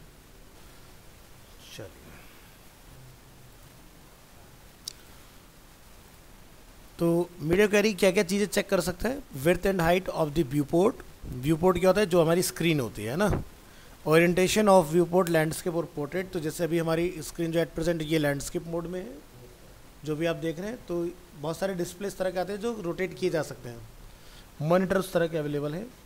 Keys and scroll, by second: 1.3 ctrl+s.